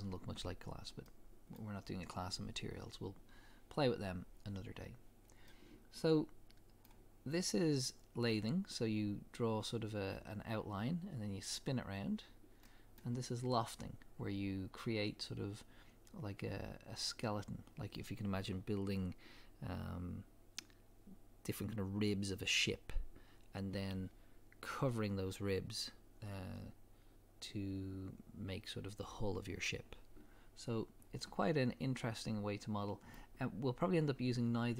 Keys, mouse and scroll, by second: 1.1-5.1 middle drag, 5.5 middle click, 12.0-12.7 drag, 12.0-12.7 right drag, 12.7-13.0 middle drag, 13.0 scroll down 2, 13.2 scroll up 2, 18.0 click, 31.2-34.7 middle drag.